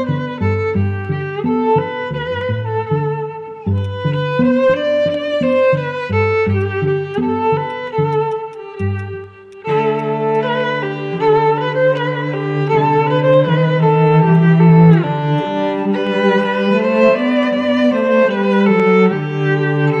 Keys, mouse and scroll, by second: 5.5 right click, 8.3 double click, 14.9 right click, 16.4 right click.